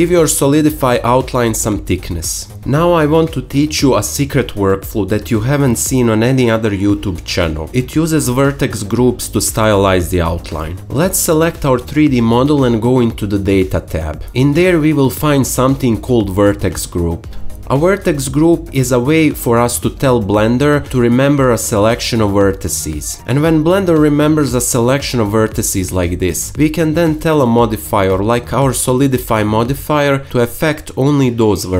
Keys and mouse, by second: 0.6-4.0 drag, 4.6-6.1 alt+shift+middle drag, 6.8 KP_Decimal, 7.4 alt+middle click, 15.8 click.